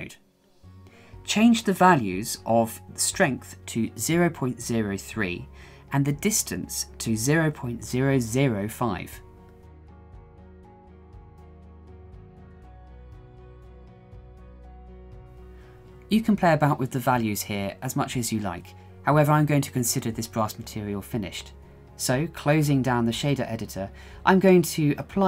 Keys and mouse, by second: 2.7-4.8 drag, 5.2-7.8 drag, 8.7-12.9 drag, 10.2 KP_0, 14.3-14.8 shift+middle drag, 16.3-21.3 middle drag, 22.2 middle click, 22.6 shift+middle click, 24.5 click.